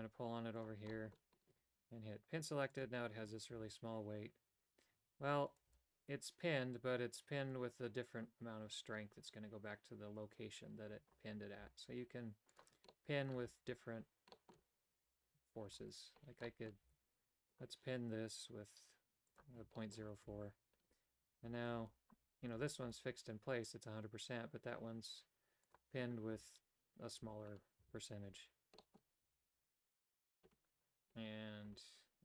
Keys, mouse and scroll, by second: 0.9 middle click, 2.7 click, 3.5 a, 5.7 g, 11.6 g, 12.9 middle click, 13.4 a, 14.4 middle click, 16.5 middle click, 16.8 g, 19.3 click, 19.8 middle click, 20.3 a, 21.6 alt+right click, 22.4 alt+right click, 22.8 g, 26.3 a, 27.2 a, 27.8 a, 28.8 middle click, 29.2 a.